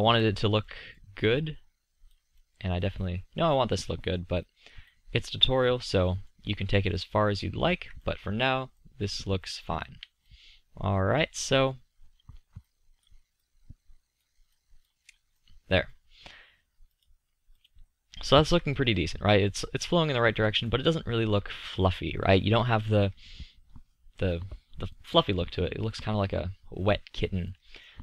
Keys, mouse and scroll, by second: 0.2-0.9 middle drag, 2.9 middle drag, 7.9-8.3 middle drag, 12.3-12.9 middle drag, 12.9-15.8 drag, 18.1-19.0 drag.